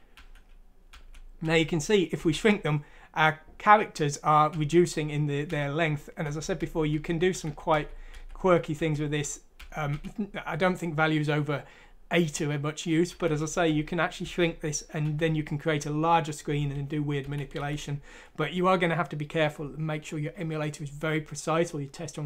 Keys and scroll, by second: 0.2-2.2 typing, 4.5-9.9 typing, 13.1-15.0 typing, 16.5-17.6 typing.